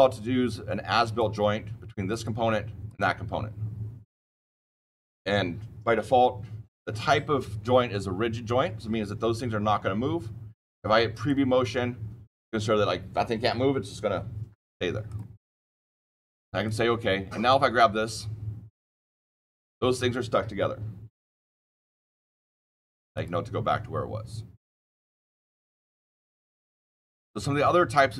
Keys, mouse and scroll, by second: 0.9 click, 2.0 click, 2.8 click, 11.0 click, 14.8 click, 15.0 click, 16.6 click, 17.4 click, 19.3 click, 25.0 click, 26.2 click.